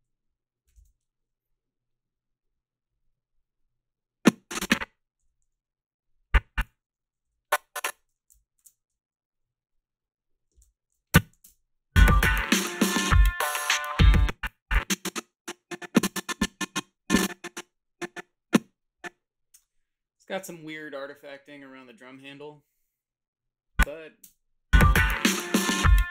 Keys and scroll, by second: 0.7 KP_7, 5.2 x, 7.8 o, 8.6 ctrl+shift+r, 11.4 a, 11.4 space, 14.0 space, 24.2 space.